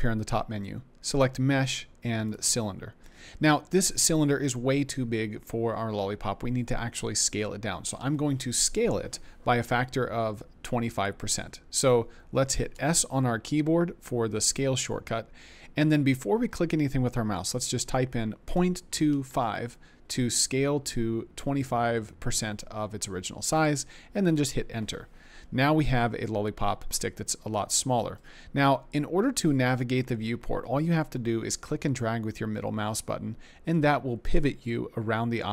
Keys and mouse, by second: 12.8 s, 18.8 ., 18.8 2, 19.3 5, 24.3 Return.